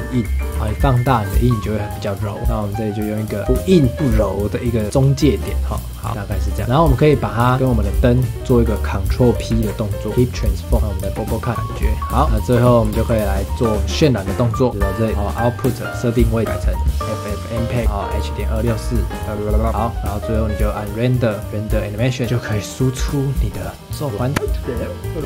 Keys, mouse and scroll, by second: 0.5 s, 2.4 s, 3.4 s, 4.8 s, 6.1 ctrl+s, 6.6 click, 7.7 shift+click, 9.5 ctrl+p, 11.0 space, 11.5 ctrl+s, 11.5 shift+middle drag, 11.8-12.2 scroll up 2, 12.2 ctrl+s, 12.5 space, 12.9 ctrl+s, 14.5 click, 15.1-16.2 scroll down 3, 16.4-19.7 drag, 20.7-24.1 drag, 24.1 ctrl+s.